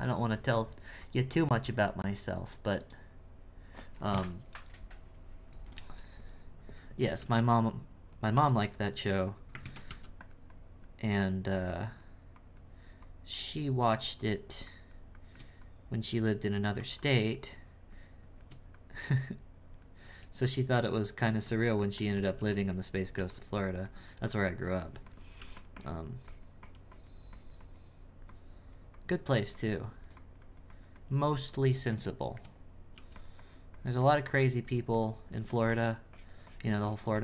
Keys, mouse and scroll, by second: 7.4 click, 8.8 click, 9.6 ctrl+z, 10.5-20.0 drag, 20.8-22.3 drag, 22.3 f, 23.1 f, 23.8-25.4 drag, 25.7-29.3 drag, 29.7-32.1 drag, 32.1 shift+middle click, 32.9 f, 33.4-35.3 drag, 35.3 f, 35.7-37.2 drag.